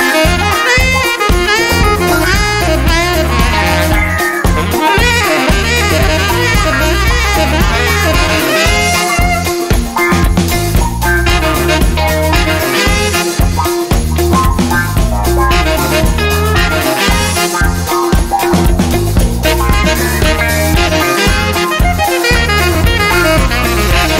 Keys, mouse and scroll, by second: 0.1 0, 0.9 click, 1.4 1, 2.2 click, 3.0 click, 3.9 click, 5.7 click, 6.2 click, 10.0 click, 10.8 click, 12.4 click, 13.4 click, 15.3 click, 16.2 click, 18.6 click, 20.5 click, 22.1 click, 22.7 click.